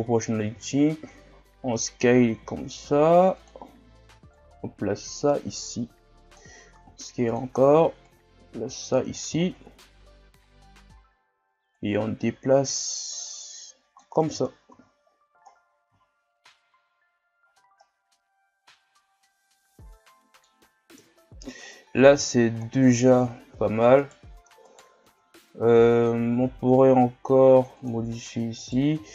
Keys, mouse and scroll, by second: 0.4 s, 4.3-6.7 drag, 6.7 s, 8.0-9.4 drag, 9.4 shift+scroll down 1, 9.7-11.7 scroll up 3, 11.8-14.3 drag, 14.3 Tab, 14.7 a, 15.1-16.0 scroll down 10, 16.0-16.6 shift+scroll up 12, 17.4 scroll down 1, 17.8-20.9 middle drag, 21.0 KP_1, 21.6 scroll up 3, 22.2-23.1 shift+scroll up 2, 23.1 Tab, 23.5 Tab, 23.9 Tab, 24.0 right click, 24.4 Tab, 24.6 right click, 25.1 Tab, 26.4 s, 28.6 alt+right click.